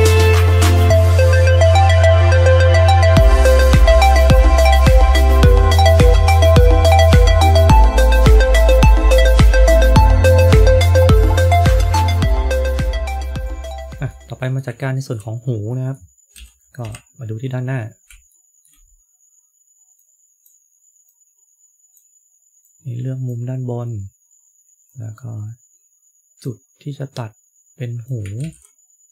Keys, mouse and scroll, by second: 0.2-0.5 scroll down 3, 0.5 middle click, 2.0 click, 2.1 click, 2.1 middle click, 3.1 g, 3.4 middle click, 4.0 middle click, 4.0 KP_3, 4.4 click, 4.7 middle click, 5.3 g, 5.9 middle click, 6.1 KP_3, 6.7 KP_1, 7.1 KP_9, 8.6 click, 8.8-9.1 scroll down 3, 8.9 middle click, 9.1 scroll up 4, 9.2 middle click, 10.4 click, 10.4 click, 10.6 g, 10.7 middle click, 11.1 KP_3, 11.3 g, 11.8 middle click, 12.0 scroll down 3, 13.4 KP_3, 14.0 middle click, 14.0 scroll up 4, 14.7 shift+middle click, 15.6 middle click, 16.2 KP_3, 16.7 KP_1, 17.5-18.2 scroll up 6, 18.2 shift+middle click, 19.9 click, 21.0 click, 22.5 click, 24.8 click, 27.0 click, 28.3 ctrl+z.